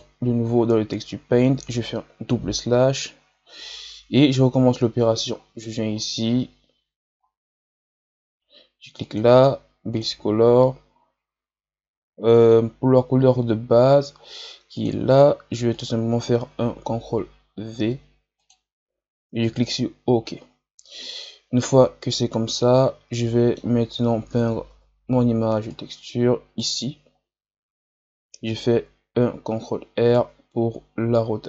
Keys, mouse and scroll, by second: 2.3 KP_Divide, 3.1 KP_Divide, 18.3 click, 21.8-22.5 scroll down 2, 22.5-24.7 middle drag, 24.7 KP_3, 25.6-27.1 right drag, 27.1-27.5 scroll up 2, 28.5-31.4 ctrl+right drag.